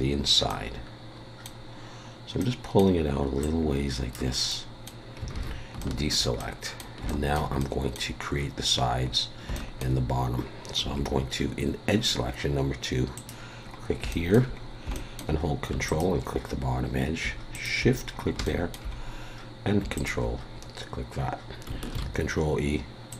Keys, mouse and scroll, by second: 0.2-0.6 scroll up 2, 0.5 middle click, 2.4 middle click, 3.4 click, 4.5 middle click, 5.3 alt+a, 5.8 shift+middle click, 6.4 middle click, 7.1 shift+middle click, 7.6 middle click, 9.1 scroll up 1, 9.6 shift+middle click, 10.8 2, 13.1 click, 13.6 scroll down 4, 14.1 shift+middle click, 14.6-14.9 scroll up 3, 14.9 shift+middle click, 15.9 ctrl+click, 17.5 shift+click, 18.1-18.4 scroll down 3, 18.4 shift+middle click, 18.9-19.8 scroll up 1, 19.8 scroll up 1, 19.9 ctrl+click, 21.9 ctrl+e.